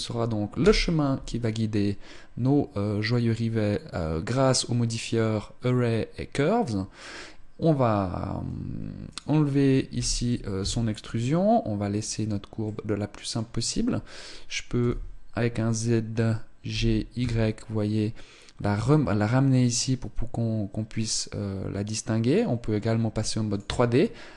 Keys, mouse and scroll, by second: 3.9-6.9 scroll up 1, 8.7 click, 11.6-11.9 scroll up 1, 12.1 middle click, 14.5 z, 16.3 g, 23.1 click, 24.0 middle click.